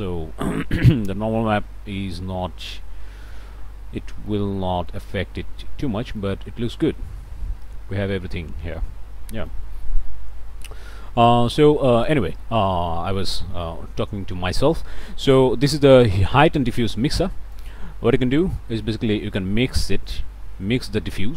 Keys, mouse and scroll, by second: 0.4-3.5 middle drag, 8.7 click, 8.8 scroll up 1, 9.4 click, 10.9-11.4 scroll up 4, 11.4 click, 11.9 scroll up 2, 12.2 click, 19.6-21.3 drag.